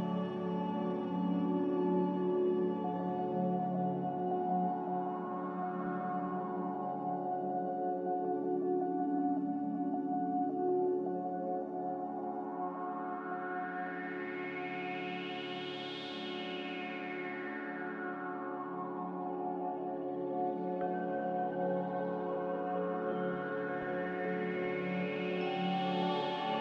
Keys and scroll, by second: 1.5 Escape, 2.5 Escape, 7.9 ctrl+z, 10.1 z, 16.0 ctrl+z, 17.1 ctrl+z.